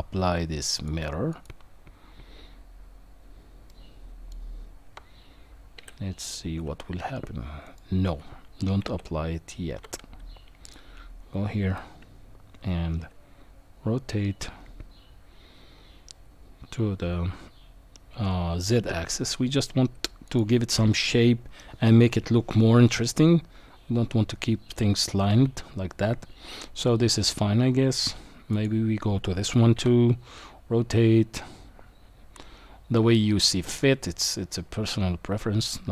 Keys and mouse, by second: 0.9-1.4 drag, 3.7 middle click, 5.8 r, 8.8 ctrl+z, 10.6 click, 11.7 r, 28.5 click, 29.7 r.